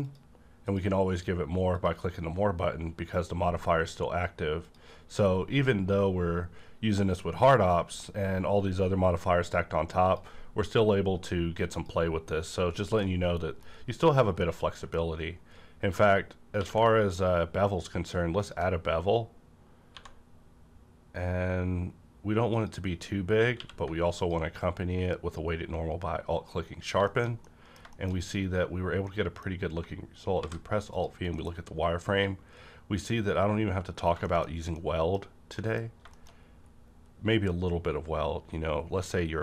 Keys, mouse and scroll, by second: 4.7 click, 10.0 click, 13.3-14.4 middle drag, 14.7 middle click, 15.0 scroll up 2, 16.6 q, 18.4 ctrl+click, 18.4 ctrl+click, 19.6 ctrl+click, 19.9 1, 22.5 click, 23.6 q, 24.2 click, 24.2 q, 26.6 scroll down 1, 27.0 middle click, 27.9 shift+middle click, 28.1-28.8 scroll up 2, 28.8 scroll up 1, 29.0-30.9 middle drag, 30.4 alt+v, 30.9 click, 31.4 middle click, 31.5-33.5 scroll up 1, 33.5 scroll up 1, 33.8-34.7 scroll down 2, 34.3 middle click, 34.7 middle click, 35.9-36.7 scroll up 3, 36.1 shift+middle click.